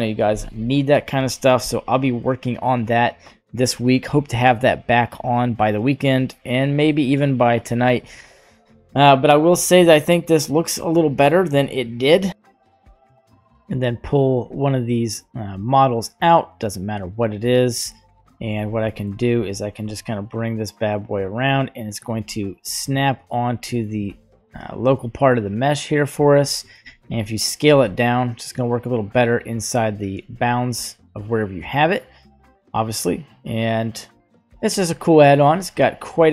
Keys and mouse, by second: 1.3 g, 8.3-8.9 middle drag, 12.5 click, 13.3-13.7 drag, 14.3-14.8 drag, 15.4-17.0 drag, 18.2 middle drag, 18.8 shift+middle click, 19.8 g, 22.0 g, 22.9-23.3 middle drag, 23.6 middle click, 24.0 middle drag, 24.8 g, 26.4 middle click, 27.6 s, 30.2 g, 34.9-35.2 middle drag.